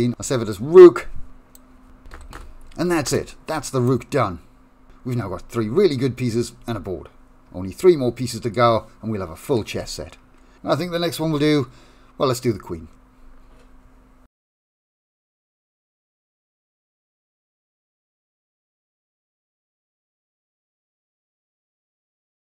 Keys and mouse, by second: 0.4 click, 4.5 click, 5.1 Tab, 5.2 2, 5.7 shift+middle click, 6.3 middle click, 7.2 shift+middle click, 8.2 click, 8.8-10.7 middle drag, 11.2 click, 12.0-19.3 middle drag, 20.0 shift+middle click, 20.6-22.4 middle drag.